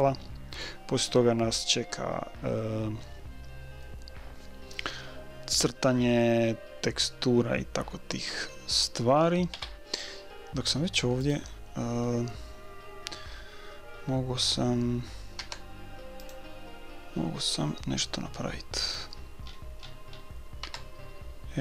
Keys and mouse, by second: 6.1-8.1 middle drag, 9.5 KP_1, 11.3-12.8 drag, 12.8 right click, 15.4 Tab, 19.0-20.6 right drag, 20.6 Tab, 20.6-21.6 middle drag.